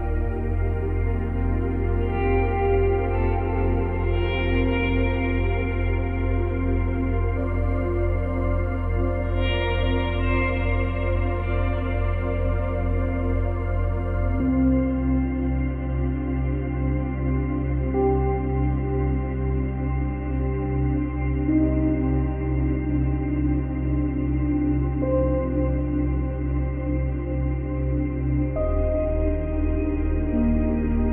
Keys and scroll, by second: 2.7 ctrl+c, 2.8 ctrl+v, 22.0 Delete, 28.8 space, 30.3 space, 31.0 space.